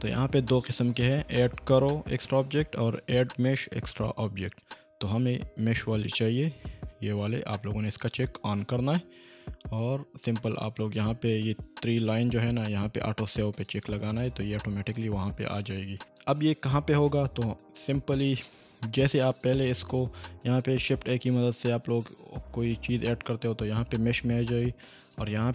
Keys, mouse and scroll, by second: 7.9 typing, 10.6 click, 12.1 click, 14.9 click, 19.8 shift+a.